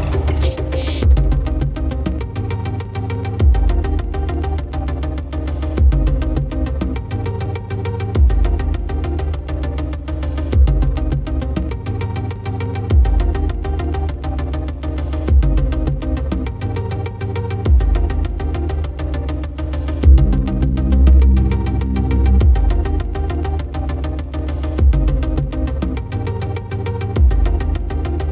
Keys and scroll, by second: 6.3 ctrl+0, 15.6 ctrl+=.